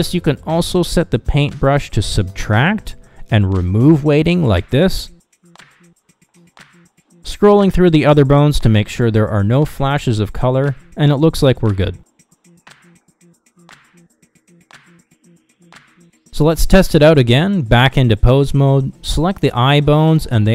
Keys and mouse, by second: 1.4-5.6 drag, 6.3 click, 7.2 middle click, 7.6 click, 8.6 middle click, 9.0 click, 10.3 Down, 10.9 Down, 11.3 Down, 11.6 Down, 12.0 Down, 12.3 Down, 12.6 Down, 12.9 Down, 13.1 Down, 13.4 Down, 13.6 Down, 13.9 Down, 14.5 Down, 14.7 Down, 15.0 Down, 15.2 Down, 15.4 Down, 15.6 Down, 15.8 Down, 16.0-16.6 Down, 16.6 Up, 17.9 ctrl+Tab, 19.5 click.